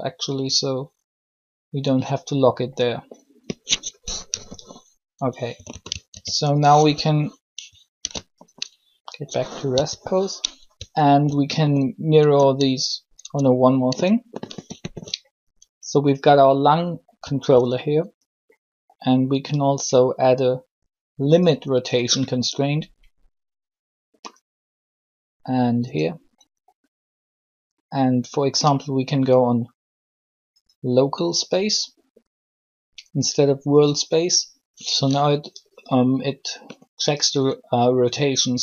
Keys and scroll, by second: 4.0 3, 5.5 typing, 6.0 alt+r, 8.0 alt+g, 9.7 1, 12.2 alt+shift+Tab, 13.2 Tab.